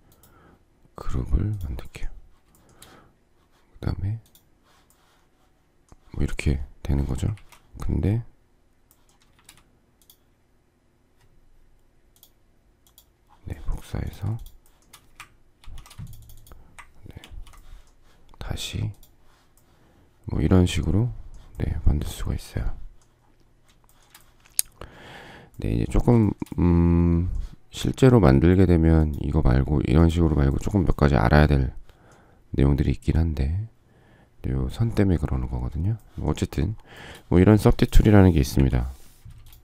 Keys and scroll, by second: 38.5 Delete.